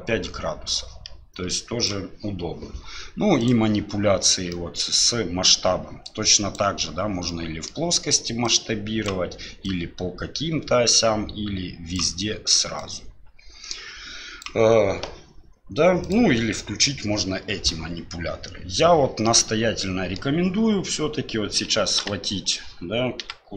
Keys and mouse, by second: 4.5 middle click, 5.5-6.6 drag, 7.3-7.7 middle drag, 8.4 click, 9.6-12.0 drag, 12.8-14.4 drag, 16.1 click, 19.2-20.2 middle drag, 22.0 KP_1, 23.2 x.